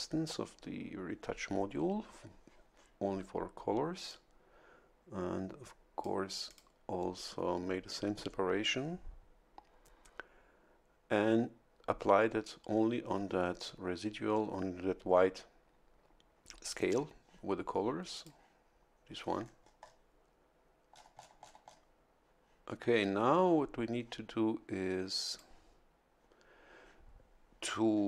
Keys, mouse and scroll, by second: 4.1-6.2 drag, 6.4 click, 18.1 click, 19.2-20.0 scroll up 1, 20.9-21.9 scroll down 1, 25.3 click.